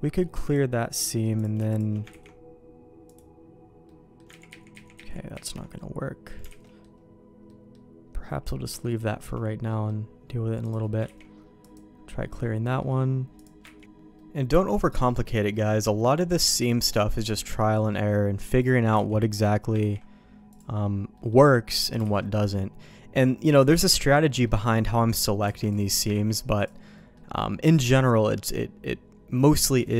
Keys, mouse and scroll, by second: 0.4-1.6 drag, 1.7 click, 2.1 ctrl+e, 3.9 middle click, 4.5 ctrl+z, 4.7 ctrl+z, 5.0 ctrl+z, 5.3 ctrl+z, 5.8 middle click, 6.5 alt+a, 6.6 middle click, 7.5 middle click, 8.8 shift+middle click, 9.7 middle click, 10.6 click, 11.0 ctrl+e, 12.6 middle click, 13.4 click, 14.1 middle click, 15.5 middle click, 16.0 middle click, 16.3 middle click, 17.1 click, 17.7 middle click, 18.6 click, 18.9 ctrl+x, 19.4 click, 19.8 ctrl+e, 21.1 middle click, 22.0 alt+a, 22.2 middle click, 23.5 click, 23.8 middle click, 24.4 middle click, 25.6 ctrl+x, 25.7 click, 26.1 ctrl+e, 26.9 middle click, 27.6 middle click, 28.2 middle click, 29.8 click.